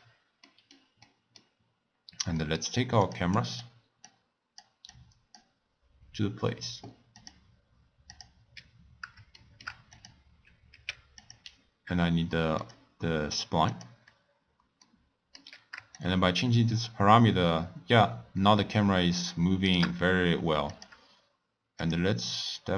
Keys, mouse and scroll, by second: 0.0 x, 0.5-1.9 middle drag, 1.9-2.4 scroll up 1, 2.4-3.0 middle drag, 3.0 drag, 3.3 click, 4.0 drag, 4.9 click, 7.2 click, 8.0 click, 8.7 scroll down 4, 9.4-9.9 shift+middle drag, 9.9 click, 10.7 x, 12.6 click, 13.7 click, 14.0-14.8 scroll up 3, 14.8-16.0 middle drag, 16.0-19.0 shift+drag, 20.7 click, 21.8 drag.